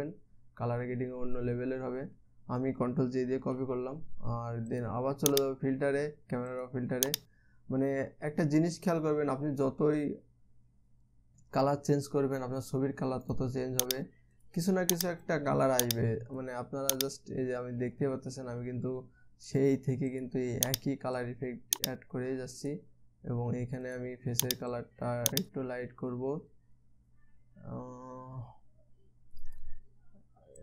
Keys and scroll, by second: 4.0 ctrl+j.